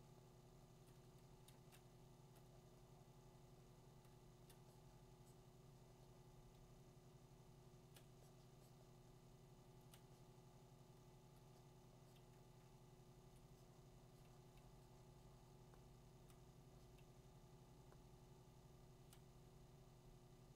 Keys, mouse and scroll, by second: 0.8 click, 1.5 2, 2.3 click, 4.5 click, 7.9 click, 9.9 click, 11.3 click, 13.4 click, 16.2 click, 18.7 click, 19.1 click.